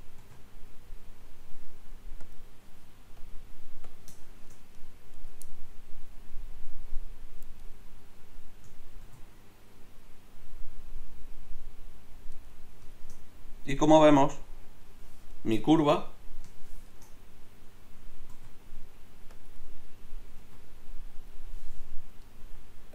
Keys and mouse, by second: 0.2 ctrl+t, 5.1 click, 5.7 click, 6.7 click, 9.0 ctrl+t, 14.1 click, 14.6 click, 15.7 click, 18.3 g, 20.4 g, 22.4 g.